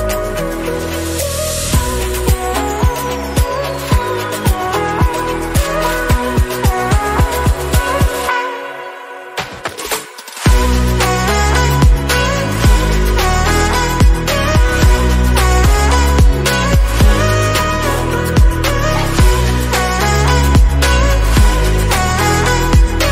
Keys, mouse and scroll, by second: 1.1 alt+z, 1.2 scroll down 1, 1.4-2.5 middle drag, 2.5 KP_1, 3.3 scroll up 3, 3.5 shift+middle click, 3.8 alt+z, 4.0-4.5 scroll up 1, 4.5-5.7 drag, 5.7 scroll down 2, 5.9 shift+middle click, 6.2 Tab, 6.8 alt+z, 7.1 middle click, 7.4-10.6 drag, 10.6 ctrl+a, 11.3 click, 11.5 middle click, 12.3-15.3 drag, 15.7 click, 16.2-16.7 scroll up 2, 17.0 middle click, 17.7 Tab, 18.0-19.0 middle drag, 19.0 click, 19.6 2, 20.1 alt+click, 20.8-22.2 middle drag, 22.2 alt+shift+click, 22.5-23.1 middle drag.